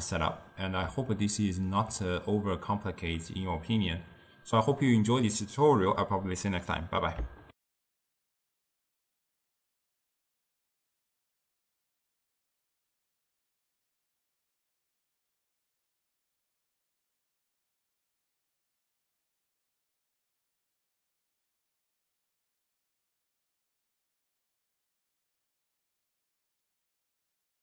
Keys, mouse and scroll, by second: 7.5 ctrl+alt+shift+w.